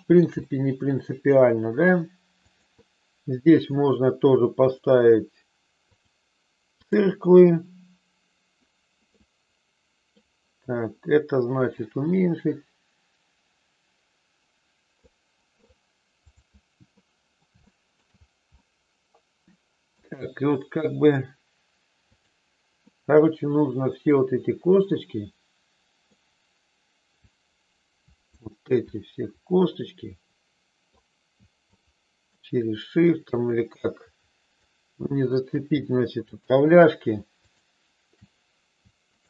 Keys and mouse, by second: 0.4 middle click, 2.4-3.6 drag, 4.5-6.0 drag, 6.9 click, 9.1-10.1 middle drag, 11.8-15.0 drag, 16.9 middle click, 17.5 shift+middle click, 18.6-20.0 middle drag, 23.6-26.1 middle drag, 27.3-28.4 drag, 29.0-30.9 middle drag, 31.8 shift+click, 33.4-34.6 shift+drag, 36.3 shift+click, 39.0-39.2 shift+drag.